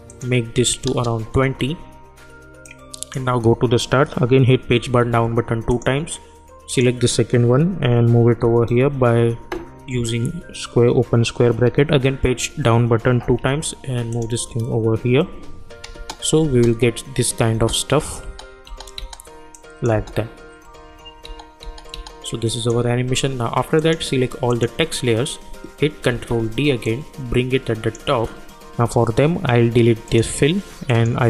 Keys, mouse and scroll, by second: 1.4 Return, 2.6-4.7 drag, 4.7 Page_Down, 5.7 click, 8.3 [, 13.1 Page_Down, 14.1 click, 15.0 [, 15.9 space, 19.5 click, 19.9 space, 22.2-23.8 drag, 24.5 shift+click, 26.1 ctrl+d, 26.8-30.0 drag.